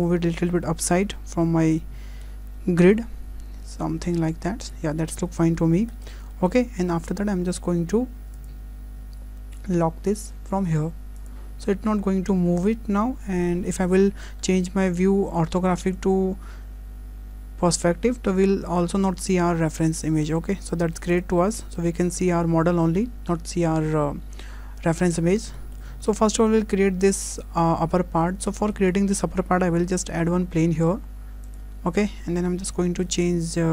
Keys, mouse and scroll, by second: 0.0 w, 2.1 g, 5.0 scroll down 4, 5.2 shift+middle click, 5.7 scroll up 3, 5.9 shift+middle click, 6.6 shift+middle click, 8.3 click, 11.1 click, 12.6 middle click, 13.9 middle click, 14.5-15.0 scroll up 1, 18.4 middle click, 21.5 scroll up 1, 21.8 shift+middle click, 24.3 scroll down 1, 24.8 shift+middle click, 25.2 scroll up 2, 25.6 shift+middle click, 25.9 scroll down 1, 26.2 shift+middle click, 28.2-28.5 scroll up 2, 28.5 shift+middle click, 29.9 shift+a, 32.5-32.9 scroll down 3, 32.9 shift+middle click.